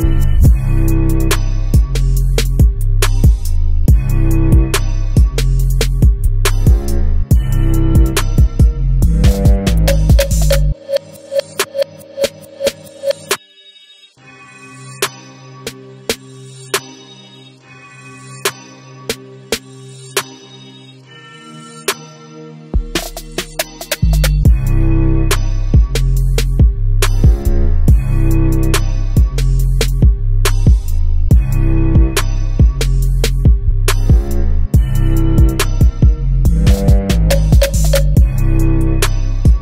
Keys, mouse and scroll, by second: 7.2 click, 7.6-12.1 middle drag, 7.8-8.3 scroll down 1, 12.1 click, 12.3-13.0 scroll down 2, 13.0-22.9 middle drag, 13.9-14.4 scroll down 2, 18.7 scroll down 2, 19.9-20.6 scroll up 2, 20.6-21.6 scroll down 2, 22.9 shift+a, 23.8 g, 24.9 click, 25.1-32.7 middle drag, 27.3 scroll up 1, 29.3 s, 32.7 click, 33.1 Tab, 34.7 2, 34.9 click, 35.9 ctrl+b, 37.9 click, 38.1-39.6 middle drag.